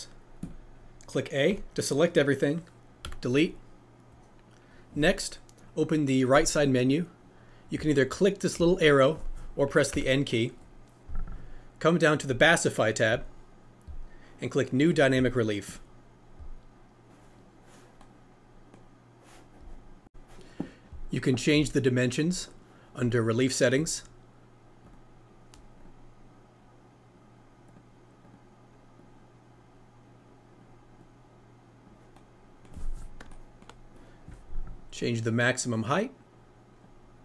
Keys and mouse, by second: 0.4 click, 3.0 Delete, 12.4 click, 15.6 click, 24.9-25.8 drag, 27.8-28.3 drag, 29.0-30.6 drag, 31.0 click, 35.1-36.9 drag.